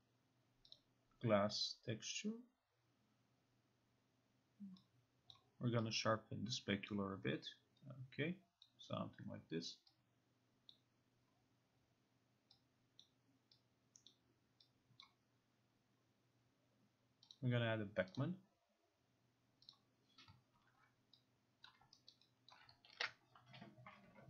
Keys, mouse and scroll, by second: 0.8 click, 5.4 click, 7.0 click, 8.7 click, 10.8 click, 13.1 click, 14.2 click, 15.1 click, 17.4 click, 18.2 click, 19.8 click, 21.7 click, 22.2 alt+middle click, 23.0 ctrl+alt+r.